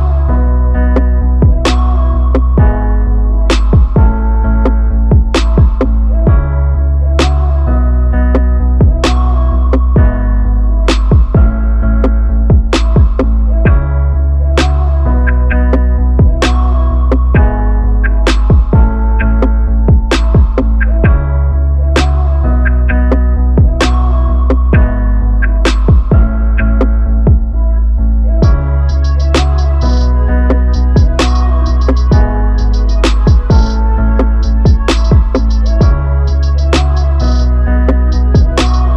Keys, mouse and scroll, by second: 0.4-1.4 drag, 1.7-3.2 drag, 3.6 middle click, 8.2-11.1 middle drag, 11.1-12.4 drag, 13.0-14.4 drag, 16.0-17.3 drag, 20.0-21.3 drag, 24.0-25.2 drag, 26.9 click, 30.0 click, 34.4-37.4 drag, 37.6 click.